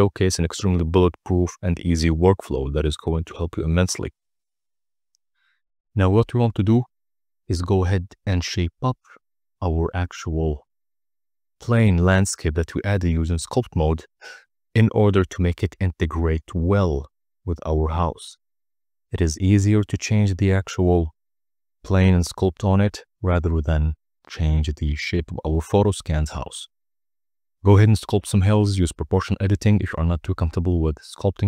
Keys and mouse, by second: 0.8-2.3 typing, 1.4 click, 3.0 Return, 4.1 g, 4.2 y, 4.5 x, 5.4 shift+click, 6.2 click, 6.4 g, 6.5 z, 7.7-8.6 typing, 8.8 Return, 10.0 click, 10.6 r, 10.7 z, 11.5-11.9 right drag, 11.9 middle click, 12.1 right click, 12.5 ctrl+a, 13.6-13.9 drag, 14.1 z, 15.2 click, 15.5 f, 15.9-18.0 drag, 18.2 KP_0, 19.1 click, 19.1 middle click, 19.4 click, 19.6 click, 20.4 click, 20.5 click, 20.7 KP_0, 21.1 click, 21.4 click, 21.6 click, 21.8 middle click, 22.1 click, 22.5-23.8 drag, 23.8 KP_0, 24.4 click, 24.7 click, 26.3 click, 26.6 click, 27.1 click, 27.9 click, 28.1 click, 28.4 middle click, 28.8 middle click, 30.4 KP_0.